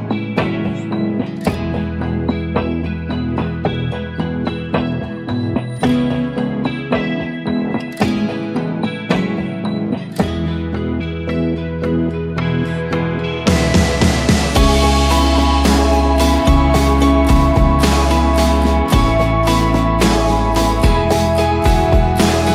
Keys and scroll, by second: 0.7 ctrl+d, 1.1 Up, 1.2 Up, 5.3 ctrl+d, 8.8-10.7 typing, 14.4 ctrl+j, 16.6 Return, 22.4 Return.